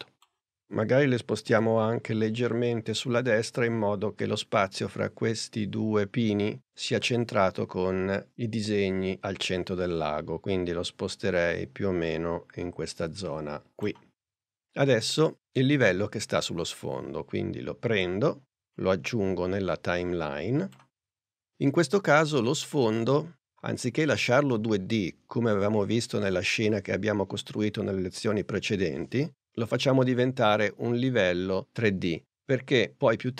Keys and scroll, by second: 1.5 p.